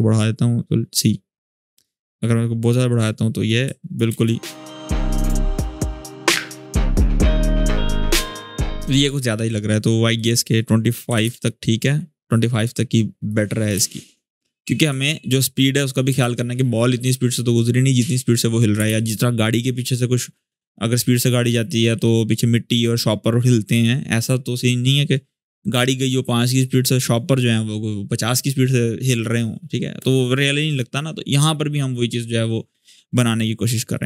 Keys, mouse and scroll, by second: 1.6-2.5 drag, 3.2-3.8 click, 3.9 space, 5.8-6.4 click, 6.4 space, 8.3-8.9 drag, 9.9 click, 10.6-11.4 typing, 12.3 click, 13.5 space, 14.6 alt+scroll down 1, 15.5-16.0 click, 15.9 space, 18.5 space, 19.2 space, 33.7 click.